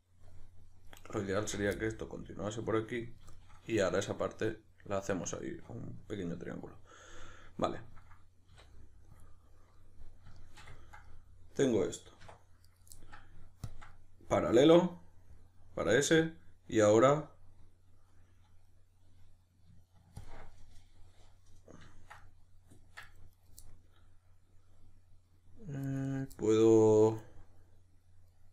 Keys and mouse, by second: 1.1 right click, 1.4 f, 1.8-12.7 middle drag, 8.5 q, 12.2 1, 12.7 right click, 13.0-13.7 middle drag, 13.7 ctrl+click, 13.9-20.2 middle drag, 20.2-20.5 ctrl+drag, 20.5-23.3 middle drag, 23.3 right click, 23.6-26.1 middle drag, 26.1 right click, 26.3-28.5 middle drag.